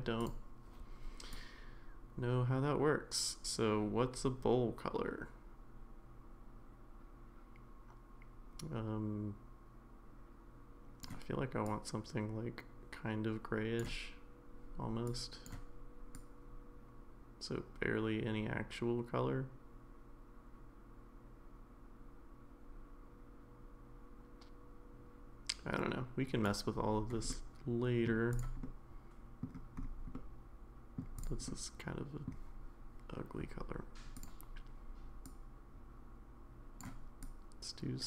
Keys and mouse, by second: 0.2 click, 27.3 middle click, 28.6 middle click, 30.1 middle click, 31.2 click, 31.5-32.3 middle drag, 34.1 click.